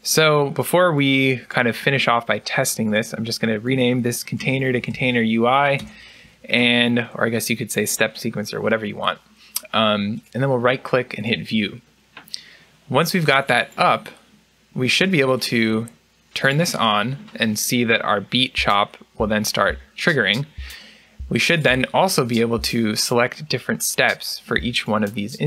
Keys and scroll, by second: 4.1 BackSpace.